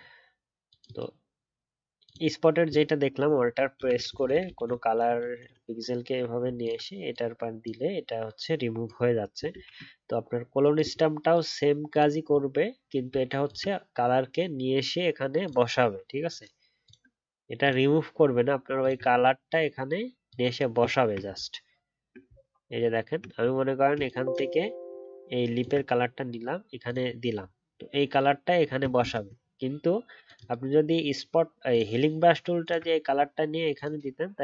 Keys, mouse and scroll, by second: 6.6 alt+click, 13.4 alt+click, 16.2 alt+scroll up 1, 16.8 alt+click, 18.8 alt+click, 21.3 alt+scroll up 2, 25.6 alt+click, 29.0 ctrl+z, 32.6 alt+click.